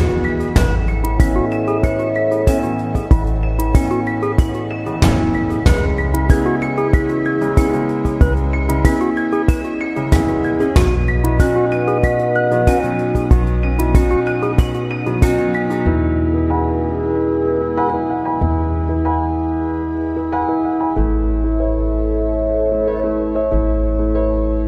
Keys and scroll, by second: 6.6 ctrl+c, 6.8 ctrl+v.